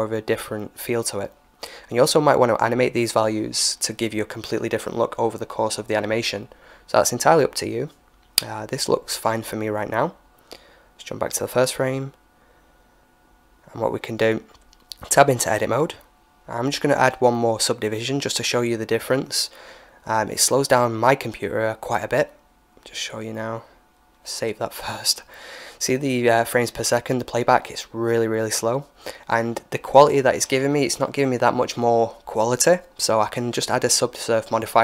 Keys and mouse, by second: 7.9-9.7 drag, 10.4-12.3 drag, 11.6 right click, 12.5 KP_1, 13.5-15.6 middle drag, 14.2 Tab, 15.5 a, 16.7 w, 18.7 Tab, 19.9-21.9 drag, 21.1 ctrl+s, 23.9 alt+a.